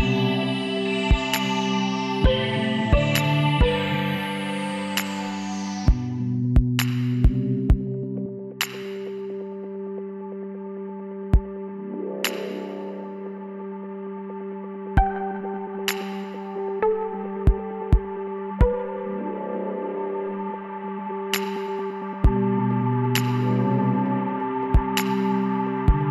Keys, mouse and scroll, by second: 2.6 middle click, 3.4 middle click, 3.7 KP_1, 5.8-9.2 drag, 10.8-12.6 drag, 13.9-17.9 middle drag, 18.7 x, 22.8-24.6 drag, 24.3-26.1 right drag.